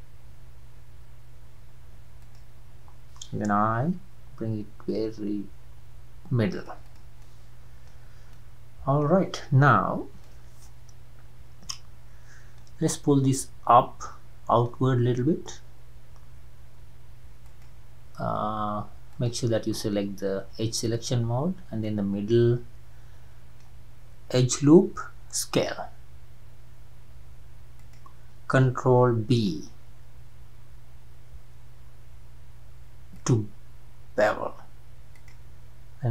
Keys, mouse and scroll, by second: 3.6 i, 6.8 click, 7.2 middle click, 8.1 scroll down 3, 8.3-15.9 middle drag, 17.5 alt+click, 19.1 click, 20.9 alt+click, 21.8-25.0 middle drag, 25.5 s, 29.4 ctrl+b, 35.2-36.1 drag.